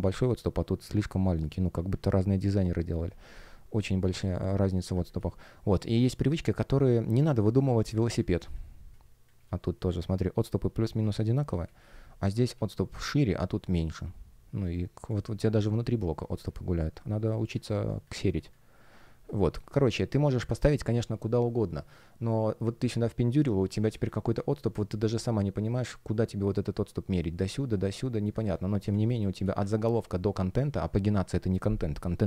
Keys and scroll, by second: 3.2 space, 8.1 space, 11.5 space, 15.0 space, 28.8 space.